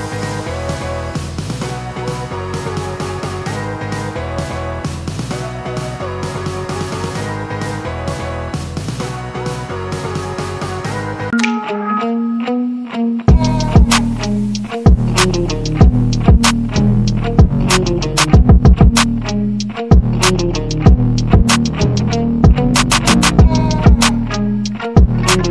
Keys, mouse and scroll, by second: 0.8 scroll up 1, 1.3 click, 2.0 scroll down 1, 2.4 click, 2.8 scroll up 1, 3.8 f, 4.1 f, 5.4 f, 6.0-11.0 drag, 11.2 click, 11.2 typing, 11.2 ctrl+s.